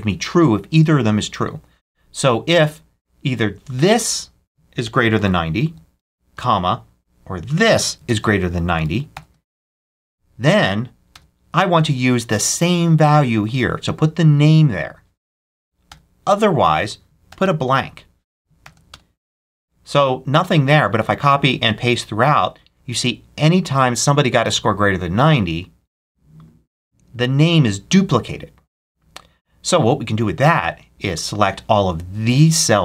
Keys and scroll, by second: 4.5-6.7 typing, 7.9-9.2 typing, 11.0 ,, 15.8 ,, 17.2 shift+', 18.5 shift+0, 18.8 shift+Return, 19.7 Return, 20.7 super+c, 21.6 super+v.